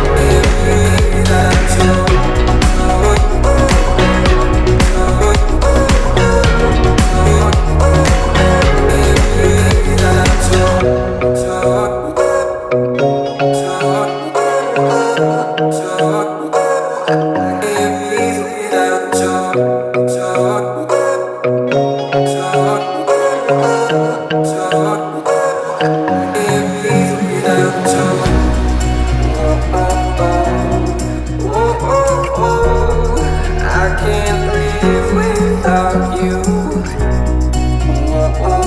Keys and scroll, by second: 1.0 l, 4.1 space, 4.9 Delete, 6.0 Delete, 19.4 t, 21.1 1, 21.3 Return, 23.5 1, 23.7 Return, 25.8 1, 25.9 Return, 27.4 space, 29.3 l, 35.8 space.